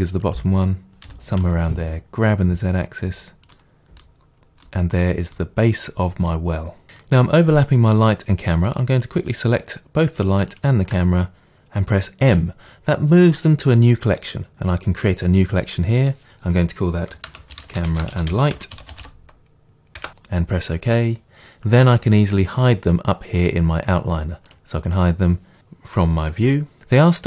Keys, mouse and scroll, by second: 0.4 click, 1.1 g, 3.4 click, 3.6-8.8 middle drag, 4.3-4.7 scroll down 1, 8.8-10.6 drag, 12.3 m, 24.5 click, 26.8 click.